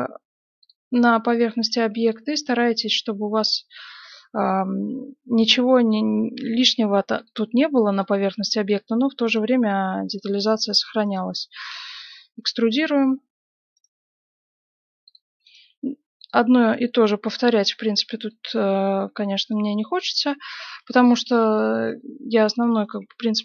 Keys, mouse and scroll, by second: 1.1-6.8 middle drag, 2.0 right click, 6.3 e, 7.9-10.8 right drag, 8.2 g, 9.4 g, 10.3-12.1 middle drag, 11.6 e, 13.7 right click, 14.4 g, 15.6 right click, 15.6 g, 16.5-20.5 middle drag, 19.4-23.4 right drag, 19.5 g, 20.6 g, 21.4-23.1 middle drag, 22.1 g, 23.1 g.